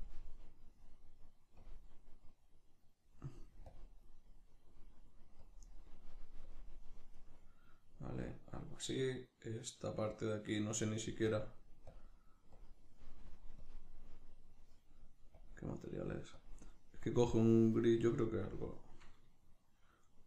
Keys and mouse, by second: 3.7-8.8 drag, 8.9 right click, 11.3-19.5 drag, 19.5-20.2 shift+middle drag.